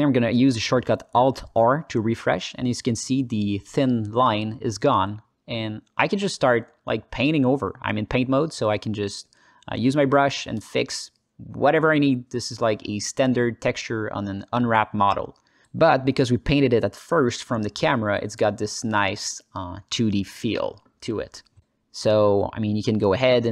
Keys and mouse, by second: 0.4 click, 1.2 alt+r, 2.6 alt+click, 3.3 ctrl+alt+click, 3.6 ctrl+alt+click, 3.9 alt+click, 4.9 alt+shift+click, 5.1 click, 6.3 ctrl+alt+click, 6.6 alt+click, 7.6 KP_0, 8.4 alt+click, 8.9 alt+shift+click, 9.2 middle click, 9.6 f, 11.1 s, 11.6 click, 12.8 click, 13.4 click, 13.7 alt+middle click, 14.1 click, 14.9 click, 15.5 ctrl+middle click, 15.8 alt+middle click, 16.7 click, 18.4 alt+middle click, 18.8 ctrl+alt+middle click, 19.0 alt+middle click, 20.0 alt+middle click, 20.9 s, 21.4 click, 22.5 alt+middle click, 22.8 s, 23.3 click.